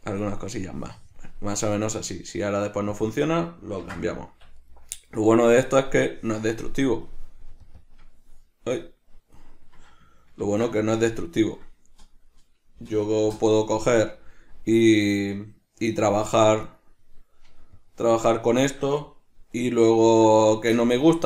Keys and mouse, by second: 0.8-3.1 drag, 3.2-4.7 drag, 4.5 Escape, 4.7 right click, 6.2-7.9 drag, 7.9-14.1 drag, 14.1 right click, 15.6-16.8 drag, 16.8 right click, 17.9 click, 18.7-21.2 shift+middle drag, 20.1 alt+q, 21.1 Tab.